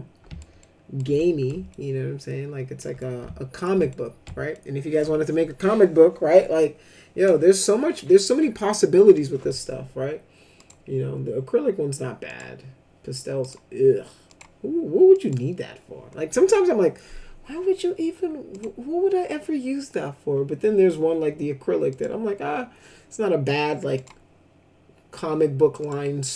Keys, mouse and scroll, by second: 0.6 ctrl+alt+middle click, 1.1 middle click, 1.7-2.8 alt+shift+middle drag, 3.0 ctrl+alt+middle click, 3.9 middle click, 4.5 ctrl+alt+middle click, 10.6 click, 12.2 click, 13.4 click, 14.3 click, 15.1 click, 18.5 click, 21.9 click, 23.9 click, 25.8 click.